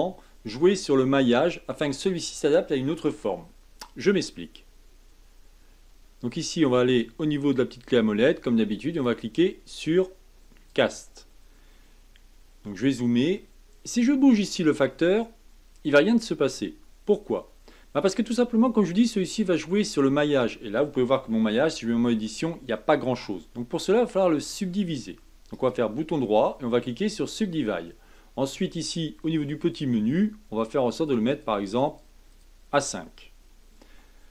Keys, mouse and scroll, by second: 6.3-7.9 drag, 8.9-11.8 drag, 11.8-14.7 scroll up 5, 14.7-17.7 drag, 18.5-21.5 middle drag, 21.7 Tab, 22.2-25.3 middle drag, 25.5-29.7 right drag, 29.7-34.3 drag.